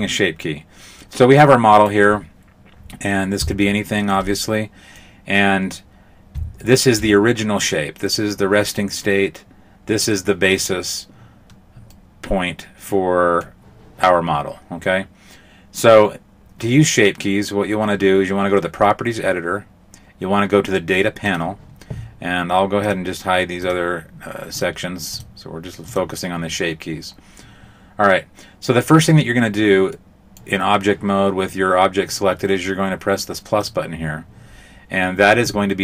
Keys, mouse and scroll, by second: 1.0 middle click, 1.8 right click, 2.8-3.7 scroll up 2, 3.7 shift+middle click, 4.4 middle click, 6.6 shift+middle click, 11.9 middle click, 21.3 click, 22.8 click, 23.6 click, 24.6 click, 25.2 click, 25.9 click, 30.0 middle click, 33.6 click.